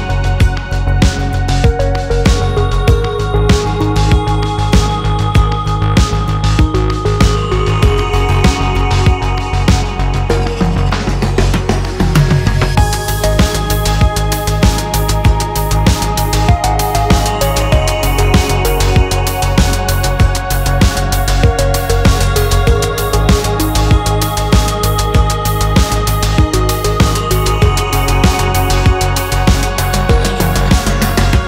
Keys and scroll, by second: 16.0-18.4 typing, 16.2 Tab, 17.3 Tab, 18.1 Tab, 26.4 2, 26.6 5, 26.8 Tab, 27.5 5, 28.3 Tab, 28.7 1, 28.8 0, 28.9 0, 29.2 Tab, 29.8 5.